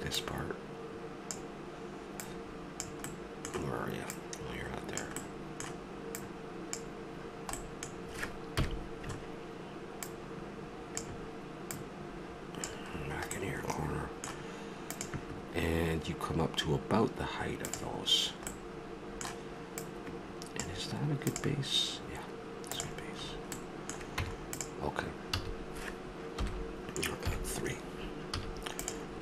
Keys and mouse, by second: 0.1-1.9 drag, 2.2 click, 3.1-5.1 middle drag, 5.1 click, 5.2 middle click, 6.2 middle click, 7.1 click, 7.6 middle click, 8.5 KP_Decimal, 10.0-13.3 drag, 13.3 middle click, 13.9-15.0 middle drag, 18.5-19.7 middle drag, 19.7-21.4 drag, 23.6 middle click, 24.1 Tab, 25.3 a, 26.4 KP_1, 27.3 KP_3, 28.4 z.